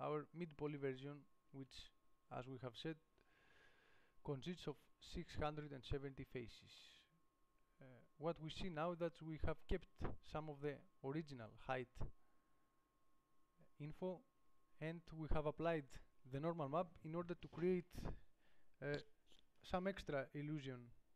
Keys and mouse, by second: 1.8 Tab, 6.5 Tab.